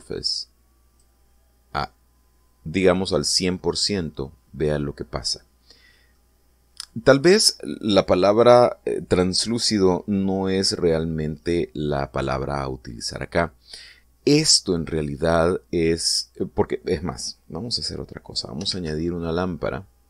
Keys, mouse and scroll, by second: 2.5-4.1 middle drag, 4.7 scroll up 1, 5.4-7.0 middle drag, 18.3 middle click, 19.3 shift+a.